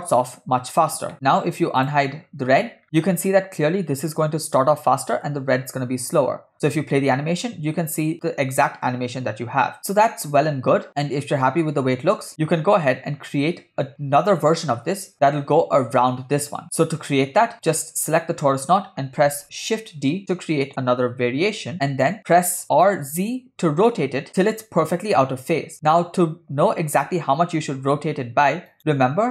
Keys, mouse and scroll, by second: 1.8 click, 2.8 scroll up 1, 6.6 space, 11.0 scroll down 2, 12.4 space, 14.8 space, 16.6 space, 17.7 click, 20.1 shift+d, 22.7 r.